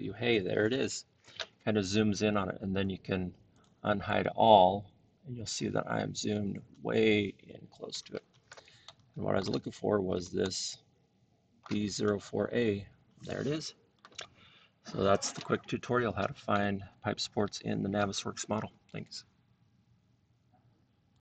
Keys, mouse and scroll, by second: 3.6 click, 5.0 scroll, 5.6-6.7 scroll, 7.3 middle click, 7.3-8.3 scroll, 7.8 middle click, 9.3-10.1 shift+scroll, 10.6-11.3 shift+scroll, 11.6-12.6 shift+middle click, 11.9-12.5 scroll, 12.8 shift+scroll, 13.7 scroll, 14.5 scroll, 16.1 scroll, 19.1 click.